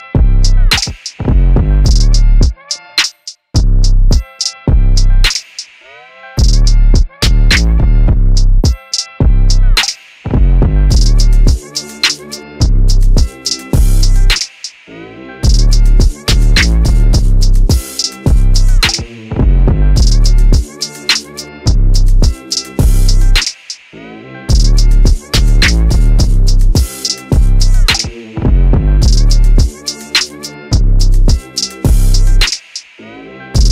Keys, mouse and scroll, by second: 1.4 right click, 4.6 ctrl+alt+shift+c, 10.5 middle click, 11.7 right click, 16.6 r, 24.6 ctrl+z, 25.4 middle click, 27.7 right click, 30.5 shift+d, 31.0 shift+d.